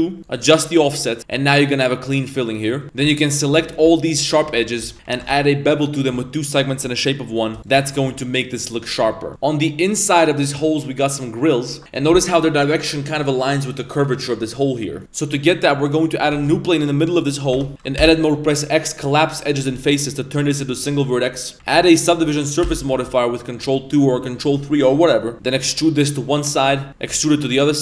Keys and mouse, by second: 0.3 click, 0.6 click, 0.8 click, 2.1 middle click, 2.8 middle click, 2.8 2, 3.2 alt+shift+right click, 3.6 z, 4.4 z, 4.5 middle click, 4.9 middle click, 4.9 z, 5.1 ctrl+b, 6.9 middle drag, 7.7 ctrl+z, 7.9 Tab, 8.2-8.8 middle drag, 15.0 shift+a, 15.7 click, 16.5 shift+a, 17.5 Tab, 18.0 x, 20.6 g, 21.5 Tab, 22.6 ctrl+2, 25.3 Tab, 25.3 1, 25.3 e.